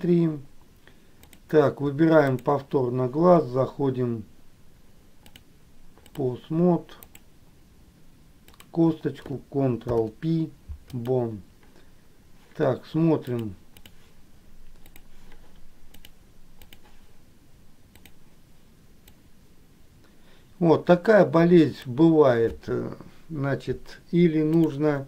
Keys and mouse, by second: 1.5 click, 5.5 click, 7.3 click, 8.7 click, 10.0 ctrl+p, 13.5 click, 15.0 click, 16.2 click, 19.4-22.2 drag.